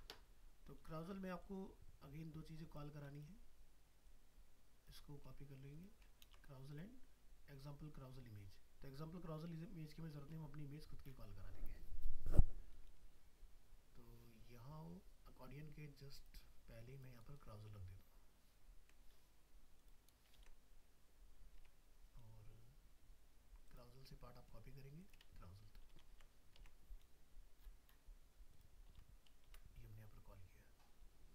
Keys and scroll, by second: 6.2 ctrl+c, 10.3 alt+Tab, 20.4 ctrl+v, 21.6 alt+Tab, 25.8 ctrl+c, 26.6 alt+Tab, 28.9 ctrl+v.